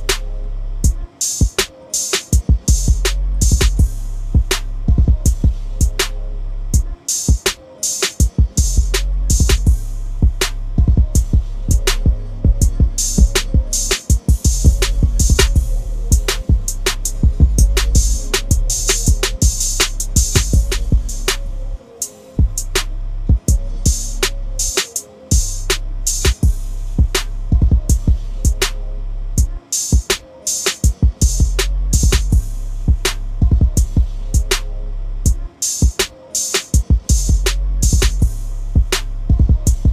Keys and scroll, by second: 7.5 typing, 23.4 ctrl+shift+i, 25.6 Delete.